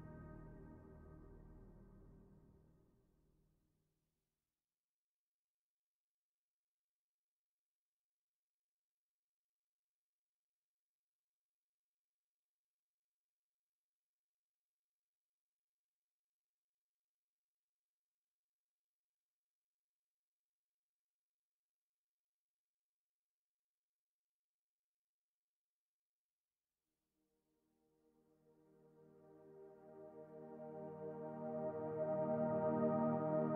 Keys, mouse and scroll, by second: 0.1-0.5 scroll down 1, 3.6 l, 5.7 l, 5.7 s, 7.4 click, 8.7 click, 12.7 click, 12.7 l, 13.7 click, 15.9 s, 17.3 click, 20.1 shift+d, 22.2 r, 23.8 click, 25.0 click, 29.7 shift+d, 32.2 r, 33.4 s.